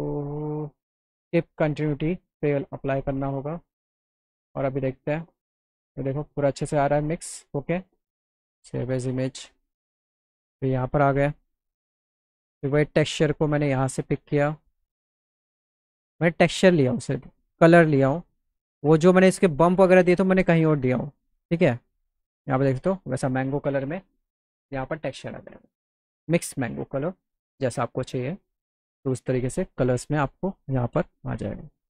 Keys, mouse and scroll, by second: 1.6 click, 4.1 click, 10.5 click, 11.2 click, 13.2 click, 14.2 click, 14.4 click, 17.5 click, 19.6 click, 21.4 click, 31.8 middle click.